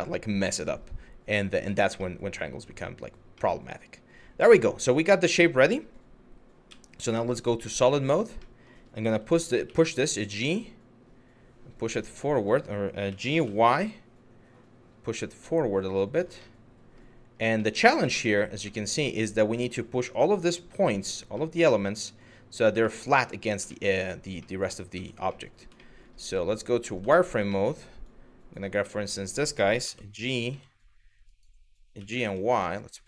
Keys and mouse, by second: 1.2 click, 1.7-2.6 middle drag, 3.1-4.3 middle drag, 4.6-5.2 middle drag, 6.3 z, 7.4-7.8 middle drag, 8.1-8.4 middle drag, 9.3 g, 12.7 g, 13.0 y, 15.8 click, 16.1-16.6 middle drag, 17.3-17.9 middle drag, 18.4-19.1 middle drag, 19.8-20.7 middle drag, 21.1-21.9 middle drag, 22.5 shift+middle drag, 22.9 middle drag, 23.4 shift+middle click, 24.1 middle drag, 24.6 Tab, 25.0 middle click, 25.4 middle click, 25.9 z, 26.7 shift+middle click, 27.2 middle click, 27.8 click, 28.6 middle click, 29.5 g, 30.1 z.